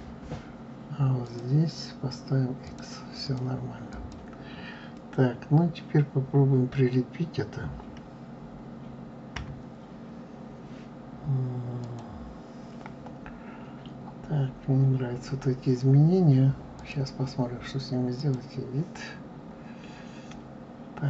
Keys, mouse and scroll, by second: 1.2 click, 2.6 click, 3.2 click, 3.8 click, 9.3 KP_3, 11.8 click, 16.7-19.3 drag, 19.3-20.0 scroll up 3.